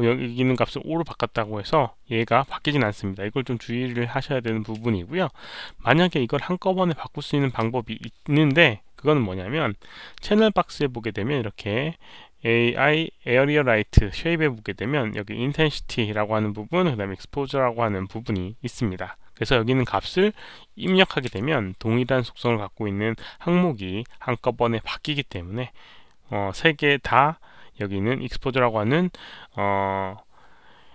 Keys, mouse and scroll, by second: 0.4 shift+click, 2.3 shift+click, 5.4 shift+click, 7.3 shift+click, 10.0 shift+click, 11.2 shift+click, 18.1 shift+click, 19.8 click, 21.3 Return, 21.3 click, 21.3 KP_5, 28.7 Return, 28.7 KP_5, 30.6 Return, 30.6 KP_5.